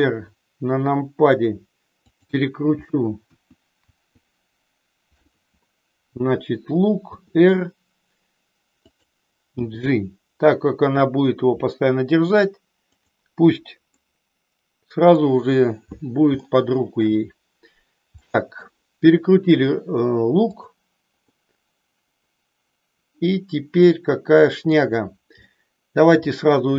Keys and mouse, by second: 2.1 click, 3.2 KP_1, 3.9 KP_2, 5.1 KP_3, 7.1 r, 9.0 click, 9.6 g, 13.0 click, 13.9-15.1 middle drag, 16.3 shift+middle click, 18.2 middle click, 21.9-24.9 middle drag, 25.6 shift+middle click.